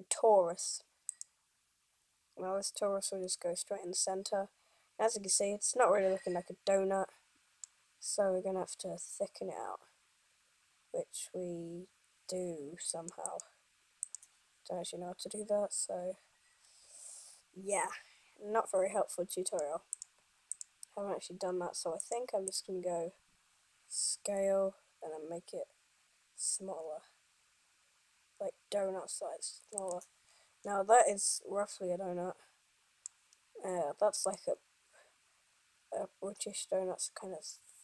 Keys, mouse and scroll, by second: 3.5 middle click, 13.0 click, 13.5 click, 19.6 click, 24.5 s, 30.5-31.5 scroll up 3, 31.5 middle click, 34.4 click.